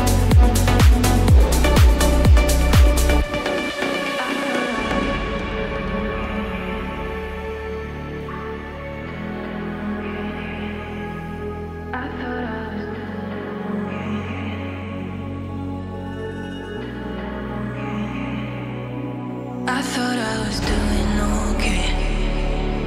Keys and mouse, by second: 3.2 click, 3.4-7.9 drag, 8.3 r, 8.5 r.